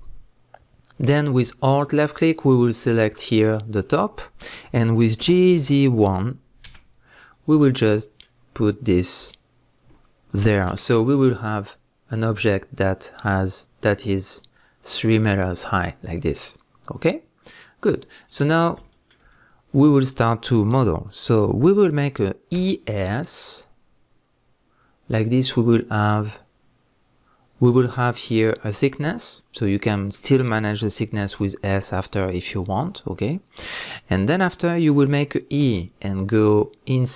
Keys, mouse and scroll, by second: 2.2 alt+click, 5.2 g, 7.3 click, 7.6-27.7 middle drag, 10.7 KP_1, 16.0 scroll down 1, 16.4-18.1 scroll up 1, 18.6 scroll up 1, 19.4-22.5 scroll up 1, 22.5 e, 27.7 click, 27.9-32.7 middle drag, 31.2 s, 32.7 right click, 35.6 e.